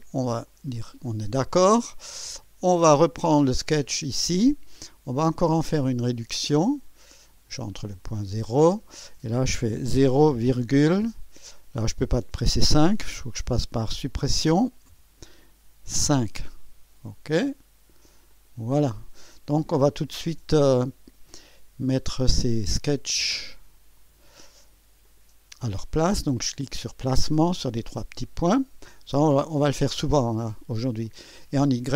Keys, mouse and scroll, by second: 0.4 click, 3.6 click, 6.0 click, 7.7 click, 9.9 KP_0, 10.4 ,, 14.9-16.5 Delete, 16.0 KP_5, 18.3 click, 23.9 click, 25.0 click, 27.6 click, 31.0 click.